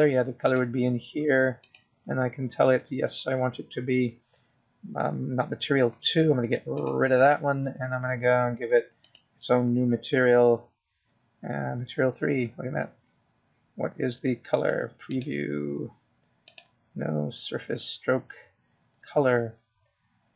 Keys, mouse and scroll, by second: 2.9 click, 4.0 click, 9.2 click, 11.4 click, 17.5 click, 18.9 click.